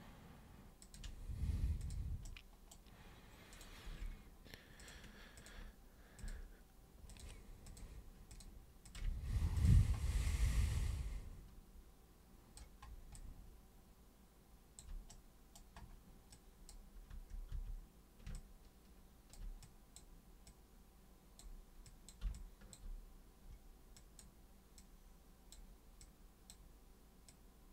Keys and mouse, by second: 0.8 ctrl+super+click, 1.8 super+click, 2.2 super+right click, 3.5 super+click, 4.8 ctrl+shift+super+click, 5.4 ctrl+shift+super+click, 6.2 ctrl+shift+super+click, 7.1 ctrl+shift+super+click, 7.6 ctrl+shift+super+click, 8.3 ctrl+shift+super+click, 8.8 ctrl+shift+super+click, 9.6 super+click, 10.2-12.5 alt+super+drag, 13.2-14.8 alt+super+drag, 15.1 super+right click, 16.3 super+click, 17.1 super+q, 17.5 super+w, 18.3-19.3 alt+super+drag, 19.6 super+click, 20.5 super+click, 21.8 super+drag, 22.3-22.7 alt+super+drag, 23.9 super+click, 24.8 super+click, 26.0 super+click, 27.3 super+click.